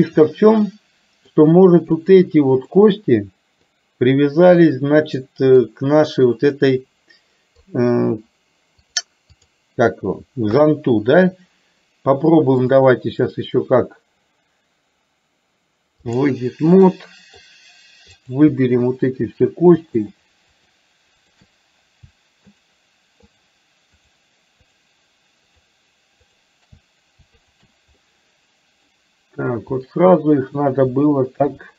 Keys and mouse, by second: 0.2-1.3 middle drag, 2.1 click, 2.8-3.8 middle drag, 4.7-5.7 middle drag, 7.6 click, 8.8-9.6 drag, 10.6 KP_3, 12.7-16.3 drag, 17.0 middle click, 18.3 click, 19.5 shift+click, 20.1 shift+click, 20.7 shift+click, 21.2 shift+click, 22.5 shift+click, 23.3 shift+click, 24.1 shift+click, 25.6 shift+click, 26.5 shift+click, 27.6 shift+click, 30.0 middle click, 31.5 KP_3.